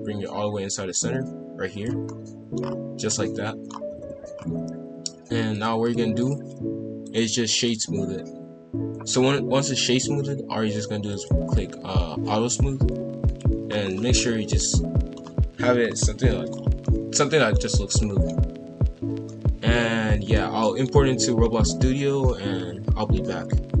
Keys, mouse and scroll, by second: 2.0 scroll up 1, 2.1 middle click, 2.6-3.0 scroll down 4, 3.0 scroll up 1, 3.1 middle click, 3.8 KP_5, 3.9 KP_1, 4.3-5.5 scroll up 1, 5.5 click, 5.8-7.0 drag, 7.0-10.0 right drag, 11.1 click, 12.4-13.6 drag, 13.6 scroll down 1, 13.8 scroll up 1, 13.8-15.2 middle drag, 15.2 scroll down 1, 15.4-16.0 scroll up 4, 16.0-16.5 middle drag, 16.5 scroll down 2, 16.8-18.4 middle drag, 18.4 KP_5, 18.5 KP_1, 18.8-19.3 scroll up 1, 19.3-23.8 middle drag.